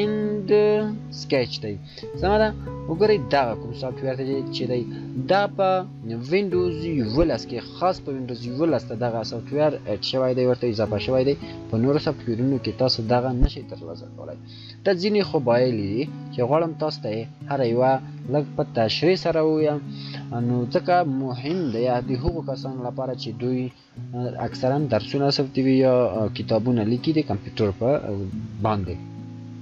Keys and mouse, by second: 5.4 shift+click.